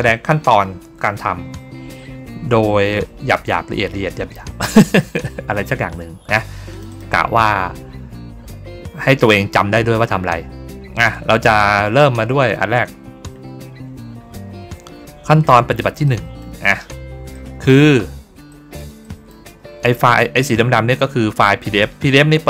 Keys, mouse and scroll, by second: 6.6 click, 6.8 click, 15.9 middle click, 16.6 ctrl+scroll down 1, 17.2 middle click, 17.9 ctrl+scroll down 1, 18.4 middle click, 18.9 middle click, 19.5-20.0 ctrl+scroll down 2, 21.4 ctrl+middle click.